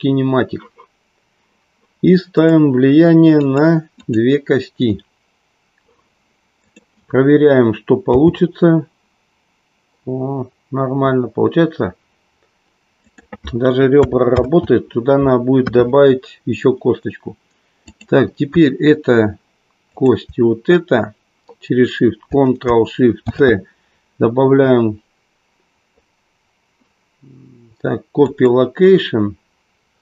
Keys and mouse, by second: 2.4 click, 3.3 click, 4.0 click, 9.9 g, 14.4 ctrl+z, 16.2 KP_3, 17.9-18.9 drag, 19.8 shift+click.